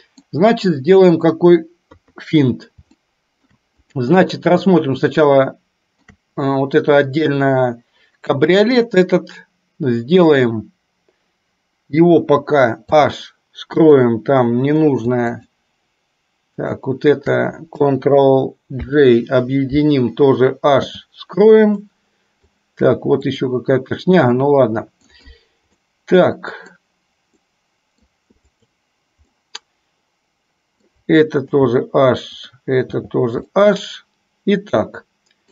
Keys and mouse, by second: 1.9 KP_3, 3.1-3.6 shift+middle drag, 4.7-6.2 shift+middle drag, 12.9 h, 13.9 click, 15.4 shift+click, 16.7 shift+click, 18.9 ctrl+j, 20.9 h, 21.8-22.7 middle drag, 24.4 middle click, 25.9-26.9 middle drag, 27.4-28.2 middle drag, 28.6 click, 29.4-30.9 middle drag, 31.6 h, 32.4 click, 33.1 h, 33.6-35.5 middle drag.